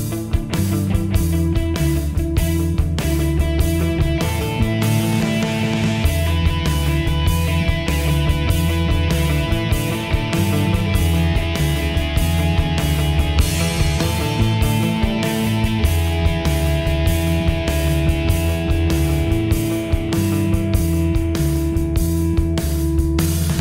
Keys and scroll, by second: 7.0 ctrl+z.